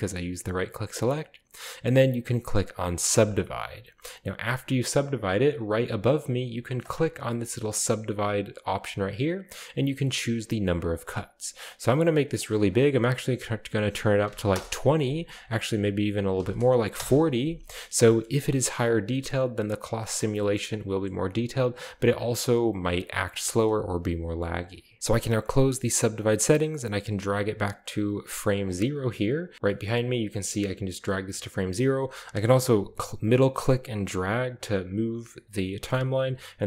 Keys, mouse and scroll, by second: 3.1 click, 6.8-7.2 drag, 7.7 click, 8.3 click, 10.8-11.9 drag, 12.4 click, 14.2 typing, 14.5 Return, 15.3-16.9 typing, 15.4 click, 16.9 Return, 18.2-20.0 shift+middle drag, 18.2-19.2 shift+scroll up 1, 21.3 typing, 26.2 click, 26.7-27.7 drag, 28.6 click, 29.5-30.3 scroll down 1, 29.6-30.5 middle drag, 30.5 click, 33.6-36.6 middle drag.